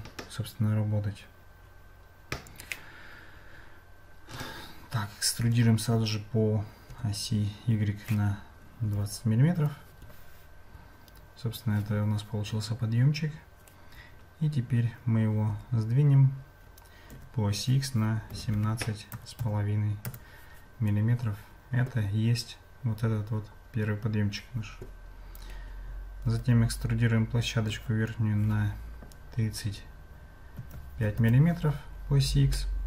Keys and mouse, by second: 15.6 g, 32.6 shift+middle click.